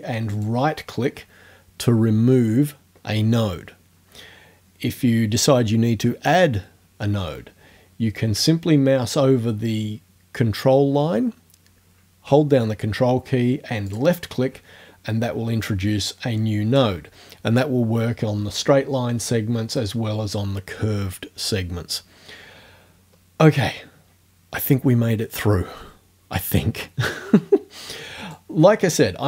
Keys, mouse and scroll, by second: 0.4 ctrl+right click, 13.9 ctrl+click, 15.7-17.0 drag, 28.2 right click.